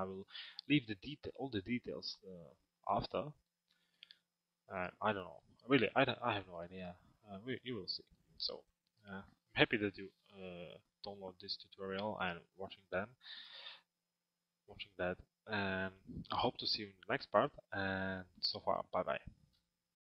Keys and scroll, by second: 19.3 F10.